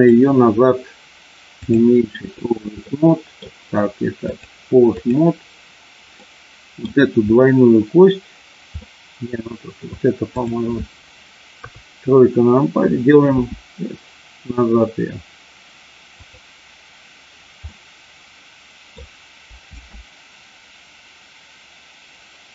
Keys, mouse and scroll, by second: 1.5 click, 2.9 middle click, 4.3 click, 6.2 middle click, 8.8-9.8 middle drag, 10.4 click, 11.5 KP_3, 13.4 s, 16.2 click, 17.5-19.0 middle drag, 19.7 space.